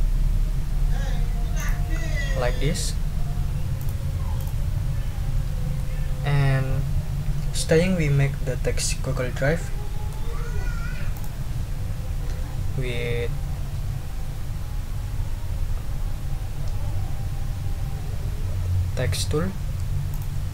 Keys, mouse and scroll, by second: 1.6 click, 3.8 click, 4.4 click, 5.7 middle click, 6.6-10.3 drag, 11.1 click, 20.1 click.